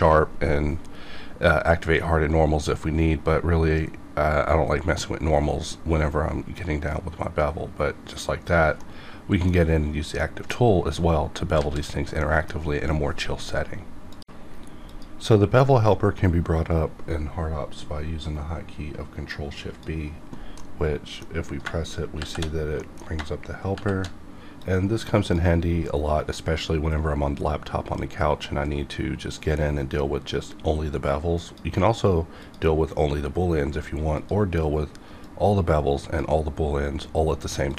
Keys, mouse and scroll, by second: 20.8-22.2 middle drag, 22.2 shift+b, 22.8 middle click, 23.7 ctrl+shift+b, 24.6-27.7 drag, 31.4-37.7 drag.